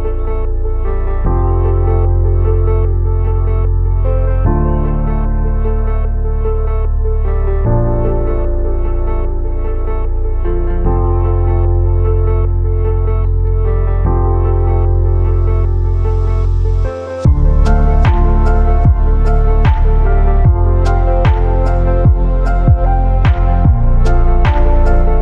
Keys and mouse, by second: 0.4 x, 2.1-3.5 drag, 3.7 Tab, 4.1 ctrl+s, 4.3 drag, 4.7 q, 7.2 click, 8.1 click, 9.1 click, 9.5-10.3 drag, 11.2 2, 11.5 shift+drag, 13.5-14.8 drag, 14.8 Tab, 15.2 2, 15.9 shift+drag, 16.5 ctrl+b, 19.9 Tab, 20.0-21.0 drag, 22.9-23.6 shift+drag, 24.0 KP_3, 24.3 z, 24.9 shift+drag.